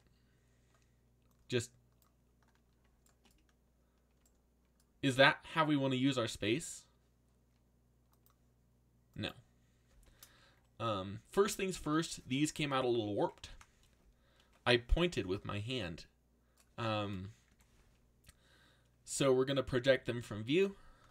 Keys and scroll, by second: 19.1 u.